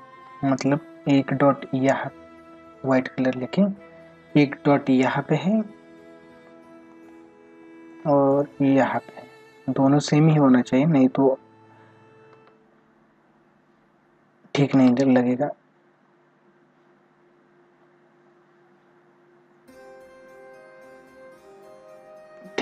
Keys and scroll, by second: 6.9 space, 10.0 ctrl+=, 14.7 ctrl+alt+z, 20.6 ctrl+=.